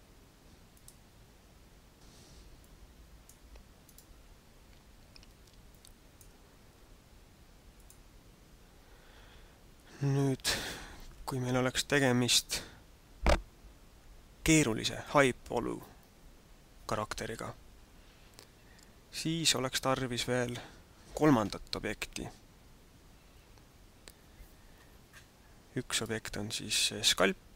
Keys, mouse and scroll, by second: 0.7 click, 2.7 click, 3.8 right click, 5.7 click, 9.8 scroll down 1, 25.9 right click.